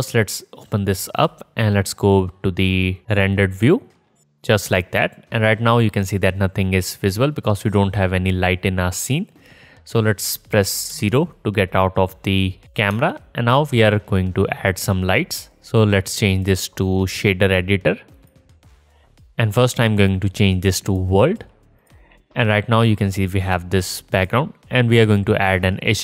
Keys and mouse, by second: 0.3-4.6 drag, 0.5 middle click, 0.5 right click, 0.6 middle click, 0.6 right click, 0.9 middle click, 0.9 right click, 10.7 KP_0, 13.1-16.3 alt+shift+drag, 17.7-18.7 drag, 22.6-24.9 drag, 25.0-26.0 drag.